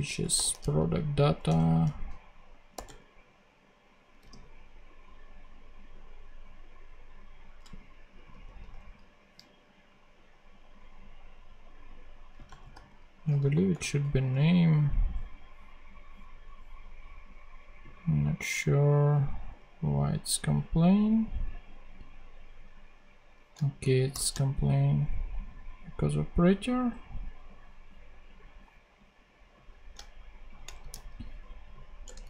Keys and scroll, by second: 0.0-4.7 typing, 8.0 BackSpace, 12.0-13.1 typing, 13.2 super+e, 13.3 super+Right, 13.6 super+;, 24.0 shift+super+p, 30.7 shift+super+c, 31.6 super+c, 31.9 Return, 32.1 super+v.